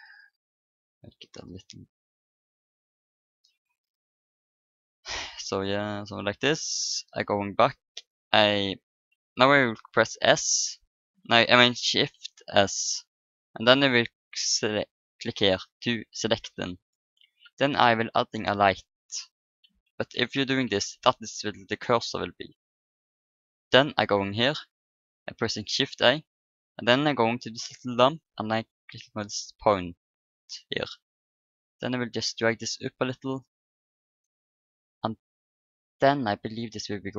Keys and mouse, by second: 4.3 middle click, 6.1-7.9 drag, 7.9 middle click, 12.4 shift+s, 17.2 shift+a, 20.1 shift+s, 23.8 shift+a, 30.7-32.6 drag, 37.0 click.